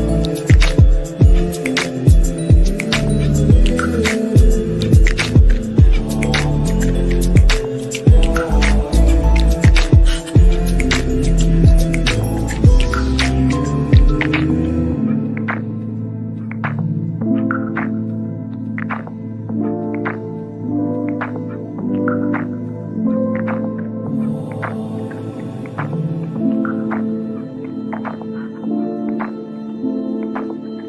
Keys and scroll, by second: 2.2 shift+F2, 2.5 F3, 13.4 F3, 14.3 Escape, 21.5 F3, 24.2 g, 29.8 ctrl+z.